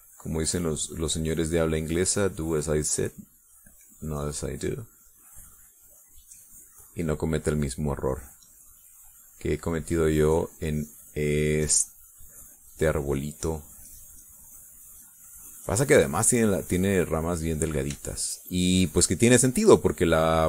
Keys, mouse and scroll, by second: 2.1-5.6 drag, 6.1-8.1 drag, 8.3 middle click, 9.4-12.5 drag, 13.2-18.3 drag, 18.4 middle click.